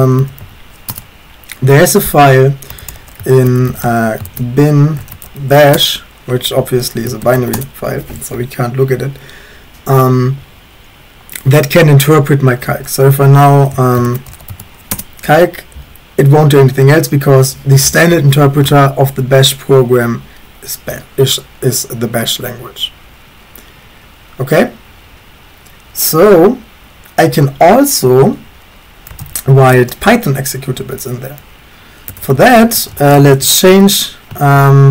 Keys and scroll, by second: 0.0-0.9 typing, 2.5-5.7 typing, 5.7 Return, 7.0-7.8 typing, 13.6-14.8 typing, 14.9 Return, 28.9-34.9 typing.